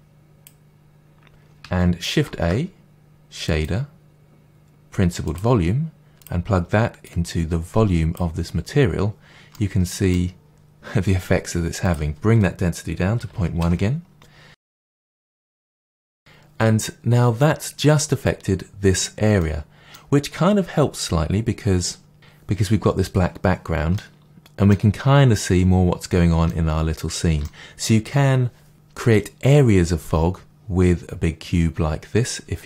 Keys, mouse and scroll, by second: 2.2 shift+a, 6.2 click, 7.0 click, 9.5-11.8 middle drag, 11.8-14.6 drag, 13.7 Return, 14.6-32.6 middle drag, 15.2 scroll down 2, 25.1-25.6 scroll up 2, 25.6-26.1 scroll down 2.